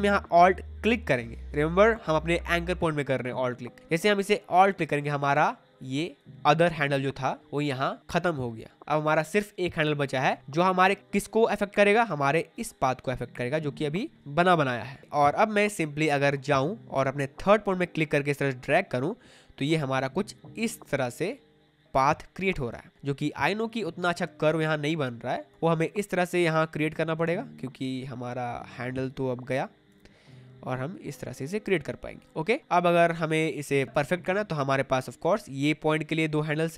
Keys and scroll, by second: 14.7 ctrl+z.